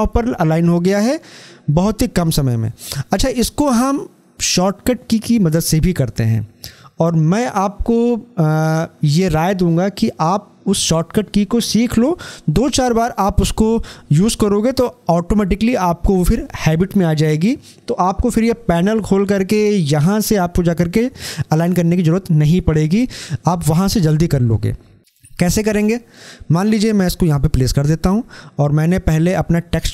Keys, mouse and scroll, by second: 3.6 scroll down 1, 26.1-29.5 drag.